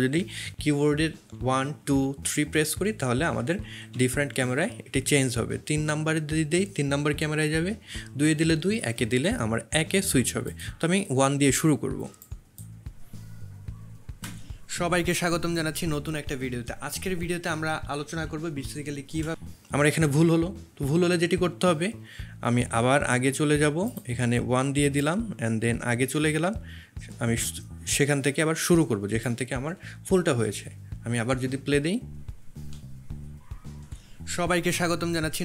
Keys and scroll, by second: 1.3 1, 1.8 2, 2.1 3, 3.3-4.8 typing, 7.7 2, 8.7 1, 14.3 space, 18.0 1, 19.2 space, 33.9 space.